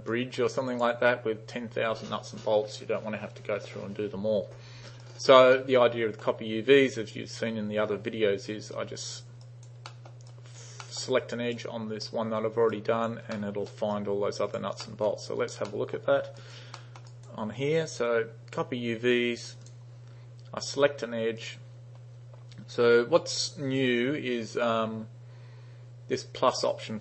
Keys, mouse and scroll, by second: 0.1-0.9 drag, 5.1 right click, 5.6-6.3 middle drag, 8.8-9.2 drag, 9.5 right click, 9.9 middle drag, 10.3 right click, 10.9 middle click, 11.4 click, 12.7 right click, 13.4-13.7 middle drag, 14.0-14.6 right drag, 14.9 middle drag, 15.3 right click, 15.7 middle drag, 16.4 right click, 16.8 middle click, 17.1 right click, 19.7 click, 21.4 click.